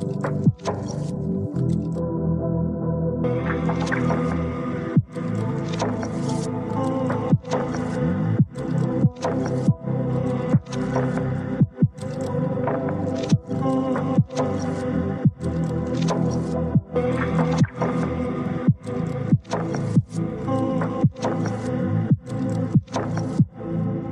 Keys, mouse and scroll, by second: 1.3 g, 4.1 click, 4.8 click, 6.1 g, 7.4 click, 9.7 ctrl+r, 12.2 click, 13.2 g, 15.3 click, 16.1 click, 17.6 g, 23.3 click, 23.7 click.